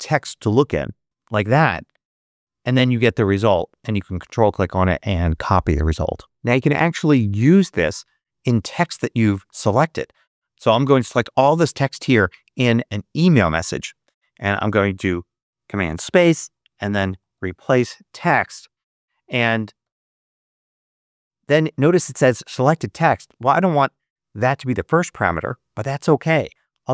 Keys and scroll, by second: 1.3 Return, 11.9 super+a, 14.5 super+space, 16.2-18.4 typing, 19.7 Return, 26.5-26.9 typing.